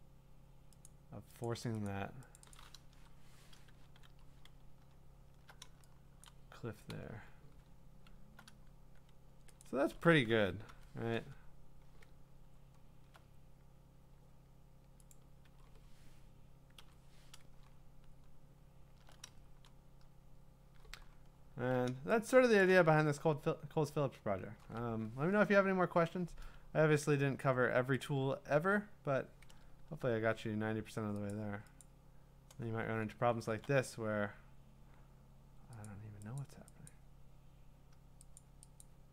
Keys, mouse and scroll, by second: 0.9 click, 1.6 click, 1.9 click, 2.5 click, 2.9 BackSpace, 3.9 ctrl+d, 4.5-5.3 scroll, 6.2 b, 7.1 click, 7.7-8.4 scroll, 8.4 scroll down 8, 9.6 click, 9.8-11.9 typing, 12.2-12.7 scroll, 15.1 click, 15.5 v, 16.8 0, 17.8-19.2 scroll, 22.4 scroll, 22.7 click, 23.1-24.7 scroll, 27.1-27.7 scroll, 28.1 click, 28.6 v, 29.5-29.8 ctrl+scroll, 31.3 click, 31.3 scroll, 31.8 click, 32.8-33.5 scroll, 34.5 scroll, 35.9 click, 36.4 click, 36.9 click, 38.4 click, 38.8 click.